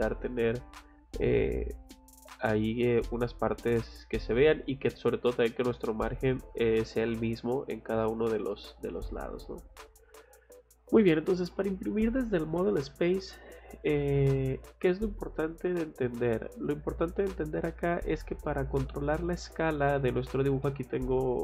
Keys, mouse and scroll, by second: 0.3 scroll up 2, 2.7 scroll down 2, 3.4 scroll up 2, 3.4 middle click, 4.6 scroll down 2, 6.8 middle click, 9.0 middle click, 9.7-10.0 scroll down 1, 16.2 middle click, 17.7 scroll down 2, 20.2 scroll up 2, 20.6 middle click.